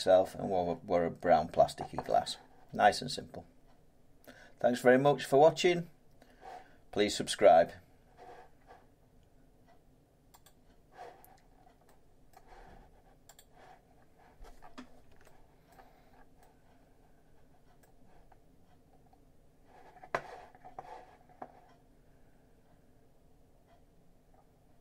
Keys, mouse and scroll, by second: 10.5 click, 11.5-11.8 scroll up 5, 12.3 middle click, 13.4 click, 13.8 scroll down 3, 15.1 Tab, 15.7 scroll up 1, 15.7 middle click, 16.1-16.8 scroll down 4, 17.8 middle click, 18.3 middle click, 18.4 scroll up 8, 18.9-20.2 scroll down 2.